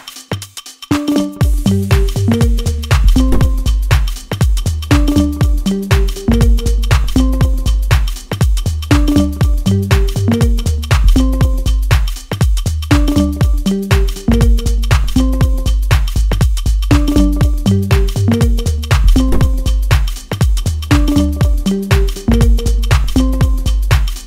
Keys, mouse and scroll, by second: 2.8 click, 5.5-6.8 drag, 6.8-13.6 middle drag, 13.6-15.0 drag, 15.0-17.4 middle drag, 17.4-19.9 drag, 19.9-21.7 middle drag, 21.7-24.2 drag.